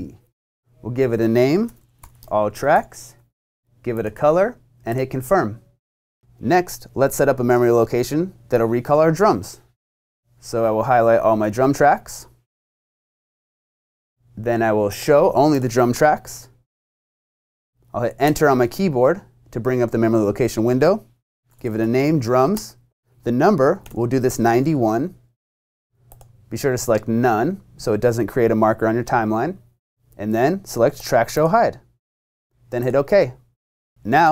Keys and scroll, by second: 1.7-3.7 typing, 18.2 Return, 21.1-22.3 typing, 22.6 shift+Tab, 23.6-24.4 typing.